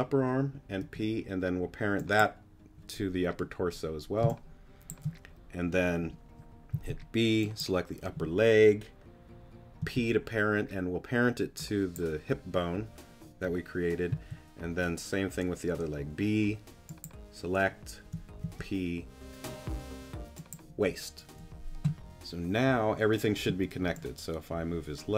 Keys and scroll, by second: 0.8 p, 4.2 space, 6.7 b, 9.8 p, 14.1 b, 18.4 p, 23.5 z.